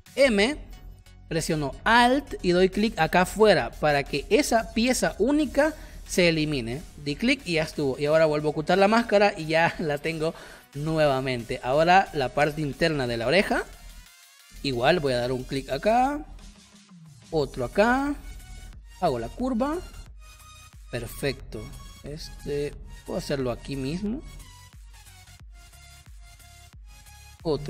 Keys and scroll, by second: 0.1 shift+m, 6.8 v, 11.4 space, 12.2 space, 13.1 p, 13.7 space, 20.2 space, 26.4 space.